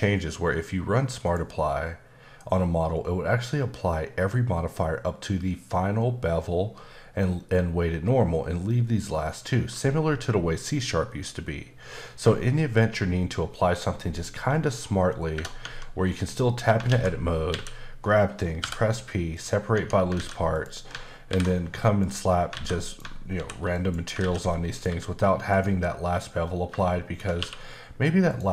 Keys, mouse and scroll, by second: 1.2 click, 15.6 Tab, 16.2-16.7 scroll up 2, 16.9 alt+a, 17.3 scroll down 2, 17.5 a, 19.3 click, 19.7 Tab, 20.1 alt+a, 20.5 click, 21.3 alt+m, 22.0 click, 22.9 click, 23.3 alt+m, 23.7 click, 24.2 alt+a, 24.7 click, 24.9 g, 26.0-26.7 scroll up 3, 26.8 shift+middle click, 27.4 q, 28.3 click.